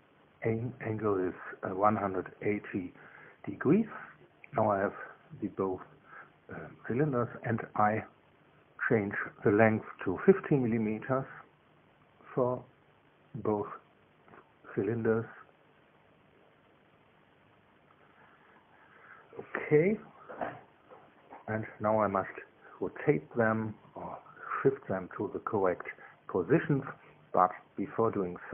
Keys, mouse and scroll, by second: 0.7 click, 1.9 KP_1, 2.1 KP_8, 2.4 KP_0, 3.1 KP_Enter, 6.9 middle click, 8.7 click, 12.1 KP_1, 12.5 KP_5, 13.1 KP_Enter, 15.5 click, 16.6 click, 17.7 KP_1, 17.8 KP_5, 18.5 KP_Enter, 25.5-28.5 middle drag.